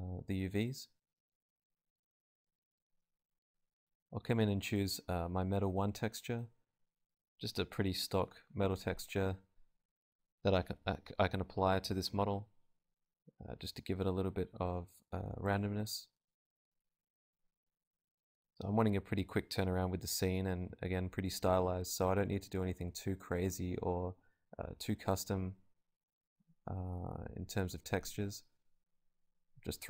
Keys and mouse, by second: 5.3-6.7 drag, 9.6-10.7 drag, 10.1 right click, 10.4 alt+z, 11.9-13.2 drag, 13.9-15.9 drag, 14.3 g, 14.9 g, 16.9 Tab, 18.4 a, 18.9 KP_Divide, 19.4 alt+z, 20.1 z, 20.5 z, 21.8 click, 22.4 Tab, 22.8-24.0 right drag, 23.0 Tab, 23.3 a, 24.0 z, 24.4 u, 25.1 alt+z, 27.3 KP_Divide, 28.0 Tab, 28.9 KP_Divide.